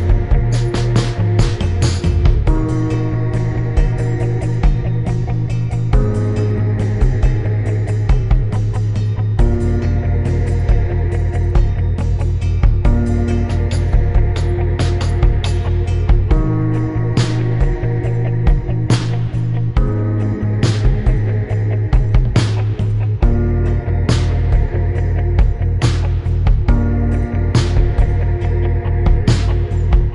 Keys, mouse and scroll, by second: 0.2 click, 0.6 click, 2.0 click, 2.2 shift+click, 5.3 Return, 7.3 click, 8.7 click, 9.0 click, 9.3 click, 10.2 Return, 11.1 ctrl+z, 11.5 click, 11.6 ctrl+z, 11.6 Return, 11.8 click, 13.5 click, 14.2 Return, 15.3 ctrl+z, 16.5 click, 16.8 click, 17.9 click, 19.7 shift+click, 20.4 click, 21.4 click, 22.3 click, 23.5 click, 25.4 click, 26.1 Return, 27.0 click, 27.9 BackSpace, 29.0 click, 29.4 click.